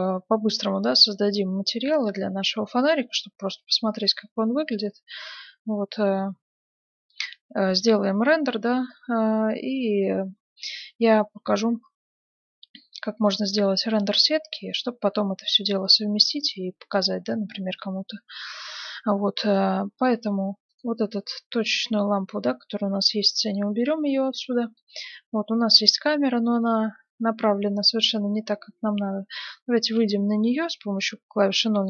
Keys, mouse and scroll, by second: 7.1-8.8 middle drag, 12.9-14.6 middle drag, 20.6-22.3 right drag, 23.0 x, 24.4-26.2 middle drag, 29.9 KP_0.